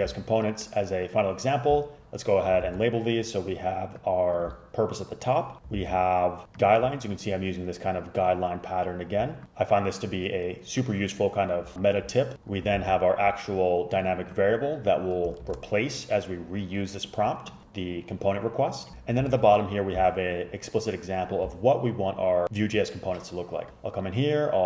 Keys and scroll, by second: 2.7 ctrl+c, 5.8 ctrl+c, 12.9 ctrl+c, 15.5 shift+super+Left, 19.4 shift+super+Down.